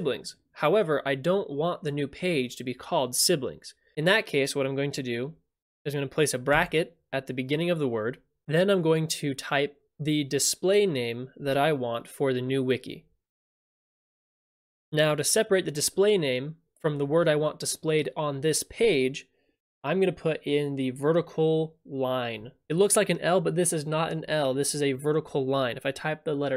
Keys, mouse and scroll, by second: 5.4 click, 6.5 [, 14.0-14.8 typing.